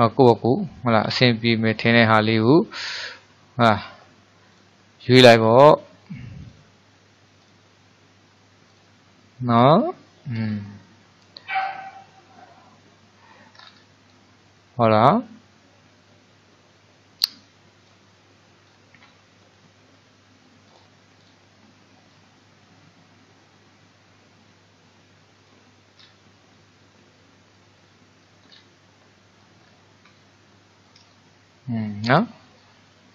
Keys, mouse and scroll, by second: 1.7-10.5 drag, 10.5-11.0 scroll down 4, 11.0-13.6 middle drag, 13.6-14.2 scroll down 5, 14.2-17.2 middle drag, 17.9-21.0 drag, 22.2-25.2 drag, 26.0-26.6 scroll up 4, 26.6-28.6 middle drag, 28.6-29.1 scroll up 2, 29.1-29.7 middle drag, 29.7-30.2 scroll up 3, 30.2-33.1 shift+middle drag.